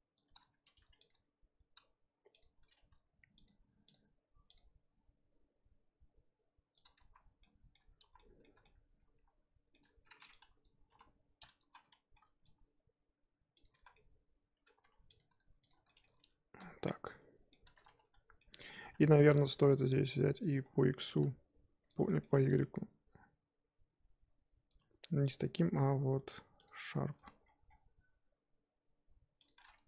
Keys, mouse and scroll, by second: 0.6 r, 1.1 g, 2.7 g, 3.9 click, 4.5 click, 4.9 g, 7.1 z, 7.3 scroll down 1, 7.4 middle click, 7.8 Tab, 8.0 z, 8.1-8.5 middle drag, 8.5 Tab, 8.6-10.6 middle drag, 10.6 click, 11.0 KP_1, 11.3-11.7 scroll up 2, 11.7 z, 12.4 g, 13.8 z, 13.9 middle click, 14.6 scroll down 1, 14.8 2, 15.1 click, 15.7 shift+click, 15.9 middle click, 16.2 f, 16.6 Tab, 16.7 scroll down 4, 16.8 middle click, 17.6 Tab, 18.0-18.4 scroll up 3, 18.4-18.8 middle drag, 18.8 scroll down 1, 19.0-20.4 middle drag, 20.4 click, 21.0 g, 22.0 middle click, 22.3 g, 26.6 click, 27.2 g, 29.6-29.8 middle drag.